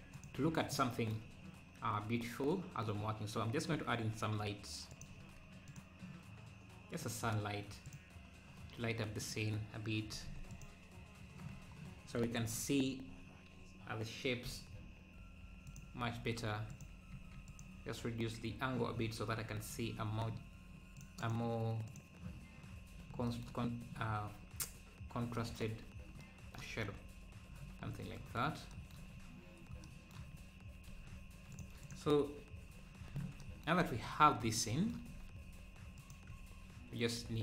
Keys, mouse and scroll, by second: 2.5-4.6 scroll up 2, 4.6-4.9 scroll up 1, 4.9-12.2 drag, 12.4 KP_7, 12.9-13.5 scroll down 2, 13.5-14.1 scroll down 1, 14.1-14.5 scroll down 1, 14.5 r, 16.7-19.7 drag, 20.9-23.2 drag, 27.1 scroll up 2, 27.9-28.7 scroll up 1, 28.7-29.3 scroll up 4, 30.4 scroll up 2, 31.0 ctrl+s, 31.5 click, 32.4 KP_Decimal, 33.0-33.4 scroll up 2, 35.1 scroll up 1, 36.0 click, 36.3 Tab.